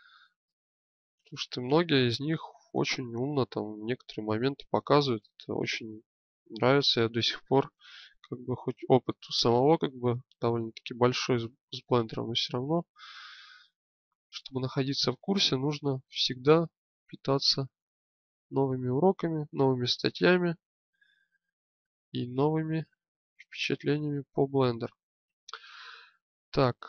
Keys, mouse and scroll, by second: 0.2 click, 2.9 middle click, 3.6 middle click, 5.1-6.2 middle drag, 7.8-8.9 middle drag, 9.6 middle click, 10.5-11.9 drag, 12.0-14.1 middle drag, 14.5 middle click, 16.9-19.3 drag, 23.7-25.1 middle drag, 26.7-26.8 middle drag.